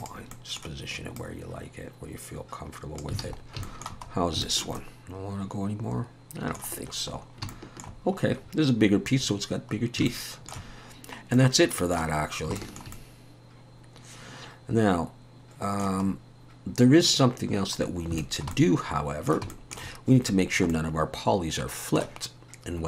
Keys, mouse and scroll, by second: 0.0 click, 0.3 middle click, 1.2 click, 3.2 alt+a, 3.4 scroll down 2, 3.7 shift+middle click, 4.1 scroll up 3, 4.4 shift+middle click, 4.8 middle click, 7.2-7.5 scroll down 2, 7.5 middle click, 8.0-9.2 scroll down 3, 9.2 scroll down 1, 9.8 scroll down 1, 9.8 scroll down 1, 10.1 shift+middle click, 11.4 middle click, 12.2 scroll down 3, 12.6 shift+middle click, 12.9 middle click, 16.1-17.6 scroll up 3, 17.8 scroll down 1, 17.9-18.2 scroll down 2, 18.2 shift+middle click, 19.5 shift+middle click, 20.7 middle click.